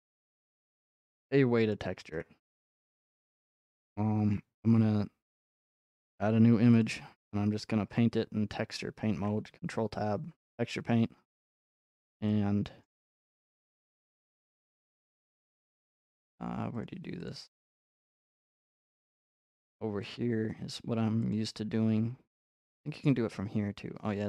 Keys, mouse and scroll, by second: 0.4 shift+middle click, 1.7 middle click, 2.1 Tab, 5.6 click, 6.8 click, 7.8 middle click, 8.5 ctrl+Tab, 9.0 Tab, 12.7 middle click, 12.8 middle click, 13.7 middle click, 16.1 middle click, 16.8 click, 17.3 click, 19.7 click, 20.1 click, 21.3 click, 22.7 click, 23.7 n.